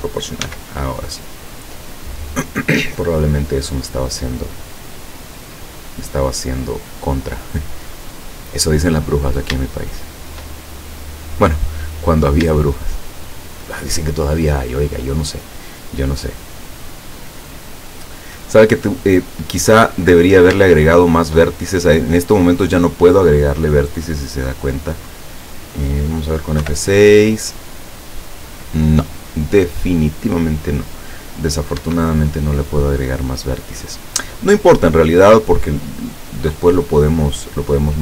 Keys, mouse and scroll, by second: 0.4 s, 1.4 click, 2.0-3.3 drag, 3.7 middle click, 4.7 scroll down 1, 5.6-6.7 drag, 9.1-9.5 scroll up 1, 9.7 shift+middle click, 11.0 middle click, 11.9 scroll up 2, 12.8 shift+click, 13.9 shift+scroll up 2, 16.3 click, 17.1-17.8 scroll down 2, 18.0 click, 19.5 scroll down 1, 20.3-20.7 scroll up 1, 20.7 shift+middle click, 21.6-22.2 shift+scroll up 2, 23.6 scroll down 1, 24.5 scroll down 1, 24.8 scroll up 1, 25.5 scroll up 1, 26.7 F6, 31.9 Escape.